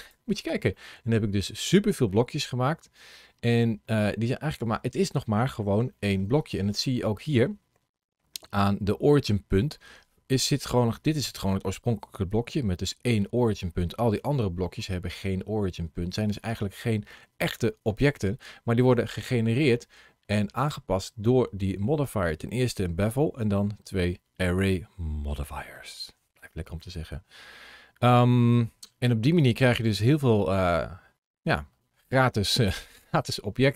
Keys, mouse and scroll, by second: 0.6 middle click, 3.7 middle click, 4.6-5.4 scroll up 2, 5.7 shift+middle click, 6.3 scroll down 2, 6.8 shift+middle click, 8.2 ctrl+shift+a, 20.4 click, 23.7-24.5 scroll up 1, 24.5 scroll up 1, 25.1 scroll down 1, 25.5 shift+middle click, 27.9 middle click.